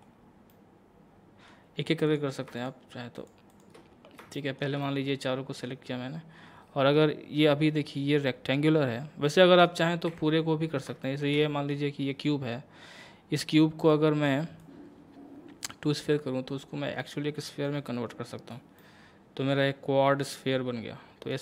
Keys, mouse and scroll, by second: 0.5-2.1 middle drag, 2.1 click, 3.2 shift+click, 3.8 shift+scroll up 1, 4.4 shift+middle click, 6.5-7.3 scroll down 1, 9.4 middle click, 10.1 a, 10.6 scroll down 1, 11.0 shift+middle click, 12.8-13.8 scroll down 1, 13.9-18.8 drag, 18.8-21.4 middle drag.